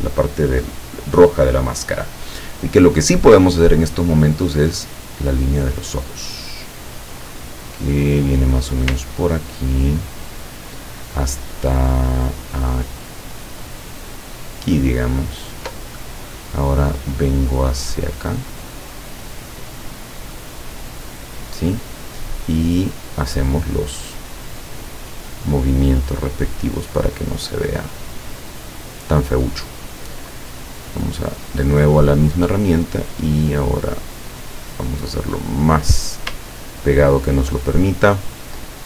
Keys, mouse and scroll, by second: 8.8 ctrl+click, 15.0 ctrl+click, 20.2 click, 24.0 click, 25.8-28.9 drag, 31.5 click, 36.2 ctrl+click.